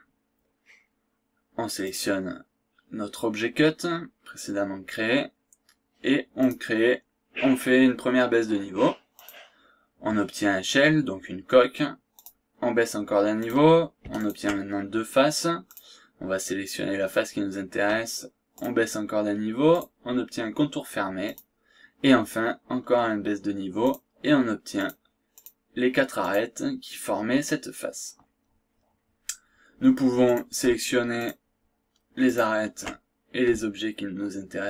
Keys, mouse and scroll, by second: 1.8 click, 6.4 click, 9.2 click, 12.2 click, 13.4 click, 14.2 ctrl+click, 15.6 click, 16.8-17.2 scroll down 2, 17.2 scroll up 2, 18.5 click, 19.7 click, 21.2 click, 23.8 click, 24.8 click, 25.4 click, 26.2 click, 30.2 click, 31.2 ctrl+click, 32.2 ctrl+click.